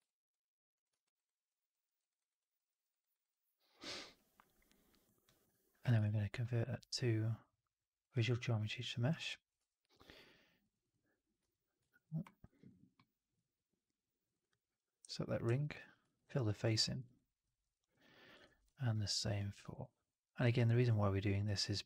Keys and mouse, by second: 0.0 alt+drag, 1.1 right drag, 1.4 drag, 1.7 middle drag, 1.9 right drag, 2.1 right click, 2.3 click, 2.6 middle drag, 2.8 right drag, 3.0 right drag, 3.2-4.9 alt+drag, 5.1 alt+drag, 5.9 shift+Tab, 8.5 alt+middle drag, 8.7 alt+right drag, 8.9 alt+right drag, 9.1-9.4 alt+drag, 10.0 click, 10.2 click, 12.0 alt+middle click, 12.1 alt+right click, 12.4 alt+right click, 12.8 click, 12.9 right click, 13.2 f, 14.3 click, 15.6 ctrl+f, 16.1 right click, 16.3 right click, 16.5 click, 16.7 middle click, 16.9 right click, 17.3 middle click, 17.6 alt+middle click, 17.9 alt+middle click, 18.4 shift+x, 18.6 alt+middle click, 18.9 alt+click, 19.4 right click, 19.7 click, 20.1 middle click, 20.3 right click.